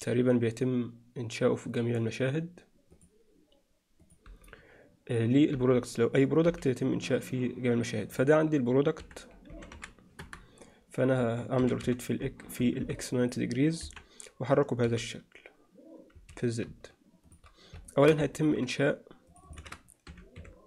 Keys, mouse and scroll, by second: 3.0-5.3 drag, 5.5 n, 6.5 n, 8.1-10.3 drag, 11.6 r, 13.9 KP_1, 14.9 g, 17.9 shift+middle drag, 18.4 ctrl+middle drag, 19.3-20.6 alt+shift+drag.